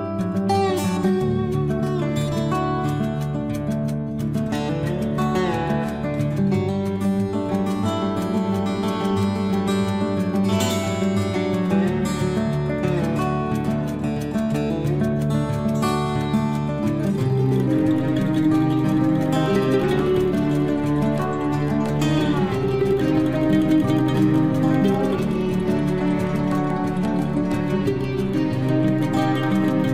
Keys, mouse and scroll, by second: 1.6 space, 1.8-3.5 scroll down 1, 7.2 scroll down 1, 9.5 t, 10.6 scroll up 1, 12.5 click, 13.5 click, 15.1-17.6 typing, 17.8 Return, 19.3 scroll down 1, 21.0-22.1 scroll up 1, 22.1 click, 23.9 9, 24.3 Return, 27.9 scroll down 1, 28.8-29.1 scroll up 1, 29.1 space.